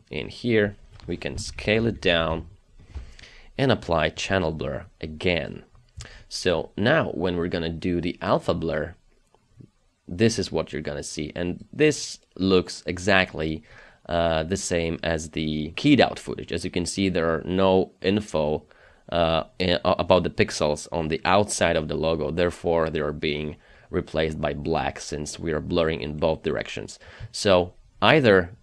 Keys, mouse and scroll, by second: 1.5 ctrl+shift+KP_Subtract.